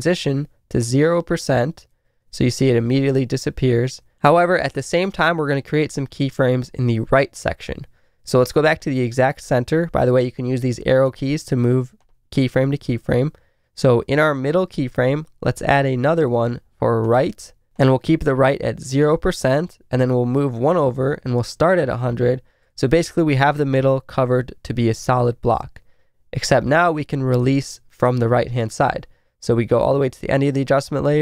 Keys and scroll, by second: 2.1 Left, 2.8 Right, 20.5 Right, 23.0 Left, 23.8 Right, 24.9 Left, 25.5 Right.